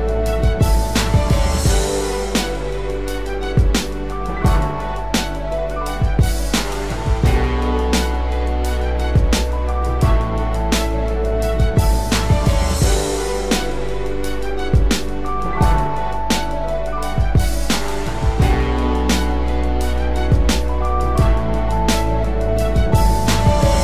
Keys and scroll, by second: 4.9 ctrl+0, 5.6 ctrl+=, 18.6 ctrl+0, 19.3 ctrl+-, 20.7 ctrl+=.